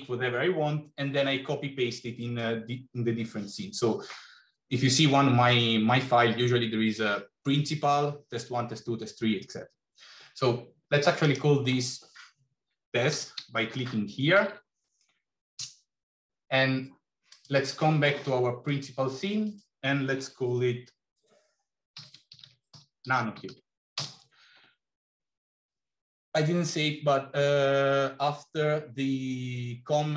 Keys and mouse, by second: 11.2-16.1 drag, 19.4-25.1 drag.